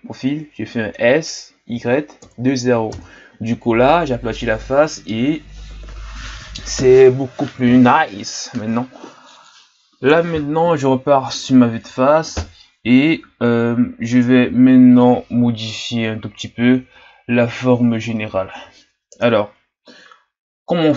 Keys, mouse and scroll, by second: 1.0 s, 10.1 KP_1.